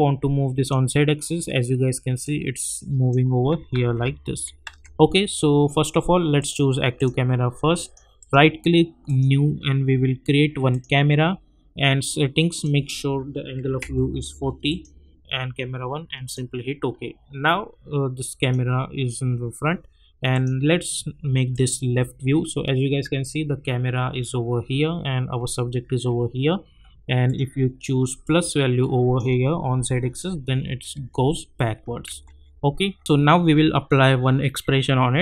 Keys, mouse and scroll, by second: 3.7 ctrl+z, 4.6 ctrl+z, 6.4 click, 8.2 right click, 9.1 click, 16.8-17.2 scroll down 1, 18.4 click, 22.5-23.0 scroll up 1, 24.8 scroll down 1, 27.2-30.5 drag, 30.5-31.0 alt+scroll up 1, 32.1 ctrl+z, 33.0 click.